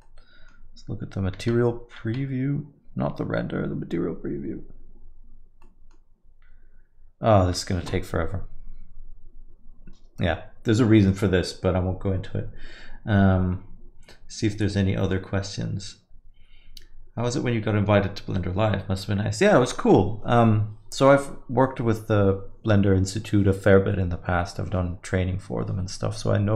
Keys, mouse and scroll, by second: 0.1 middle click, 1.3 z.